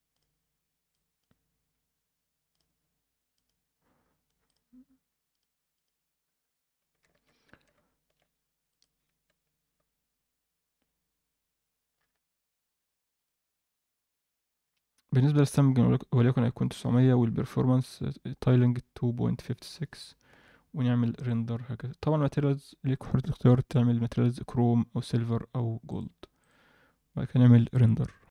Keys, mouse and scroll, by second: 0.1 click, 2.5 click, 4.4 drag, 7.1 alt+a, 8.7 click, 11.8 scroll down 1, 11.9-13.1 scroll up 1, 13.1 drag, 13.1 scroll up 1, 13.9-14.4 scroll down 1, 14.8-16.1 scroll down 5, 16.6 click, 17.2 scroll down 1, 20.4 ctrl+s, 21.1-22.0 drag, 25.8-28.3 drag.